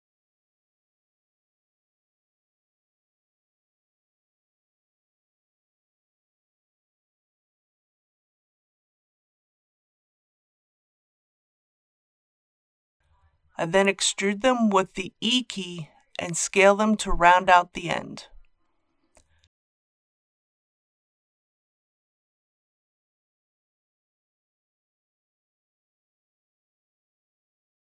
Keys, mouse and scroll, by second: 0.7 click, 6.4 right click, 7.2 middle click, 8.1-8.5 scroll up 1, 8.8 shift+middle click, 9.6 middle click, 10.9 shift+click, 11.5 shift+click, 12.1 shift+click, 12.7 scroll down 1, 13.1 middle click, 13.6 shift+middle click, 14.0 middle click, 14.5 scroll down 1, 15.8 e, 18.5 click, 18.8 typing, 20.6 shift+click, 21.1 shift+s, 23.0 click, 23.4 typing, 25.6 click.